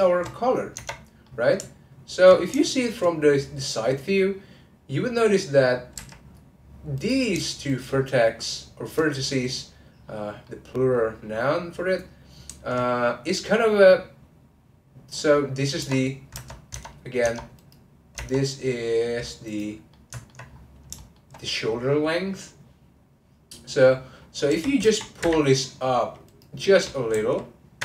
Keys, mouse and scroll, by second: 0.7 Tab, 1.2-3.1 middle drag, 3.1-6.0 scroll up 1, 6.0 1, 6.9 click, 7.7 shift+click, 10.0-10.4 scroll down 1, 10.4-13.3 middle drag, 13.3 scroll up 3, 15.1 middle click, 15.4-15.8 scroll down 1, 16.7 Tab, 17.3 Tab, 17.5 click, 18.7-19.4 scroll down 1, 19.4 click, 19.9 middle click, 20.5-20.9 scroll up 2, 20.9-24.0 shift+middle drag, 26.2 click, 27.1 z.